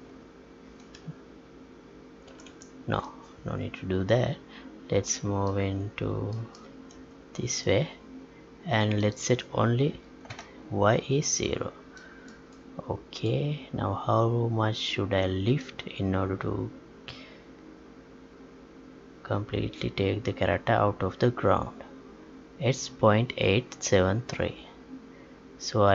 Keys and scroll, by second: 2.2 ctrl+z.